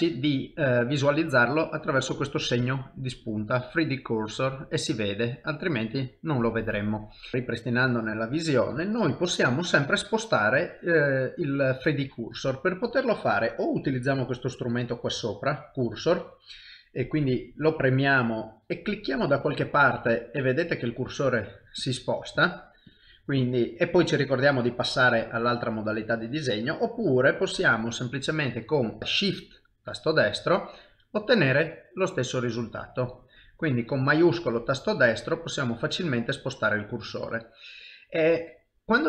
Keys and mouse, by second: 7.3 middle click, 7.3 click, 8.0 middle click, 9.3 middle click, 10.0 shift+middle click, 10.6 shift+middle click, 17.6 click, 29.3-38.3 shift+right click.